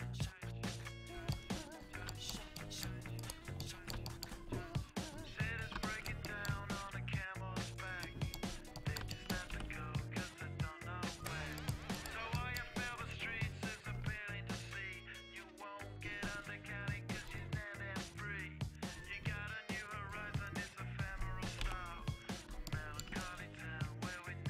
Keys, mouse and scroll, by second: 1.4-3.2 middle drag, 3.2-4.9 right drag, 5.0-6.1 middle drag, 7.0 r, 9.5 r, 11.6-16.4 right drag, 13.2-18.1 drag, 19.0-20.6 middle drag, 20.6-21.6 drag, 21.6 KP_5.